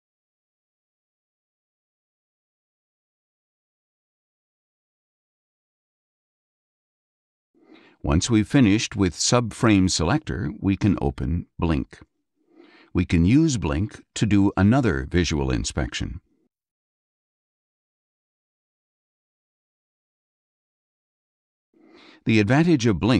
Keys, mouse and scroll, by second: 0.7 click, 11.6 click, 15.1 click, 17.4 click, 18.1 click, 18.9 ctrl+a, 21.1 click.